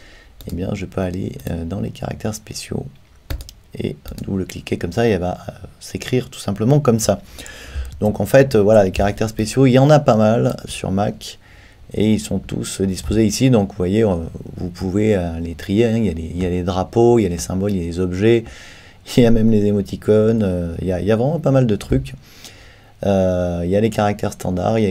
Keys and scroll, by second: 7.9 super+t.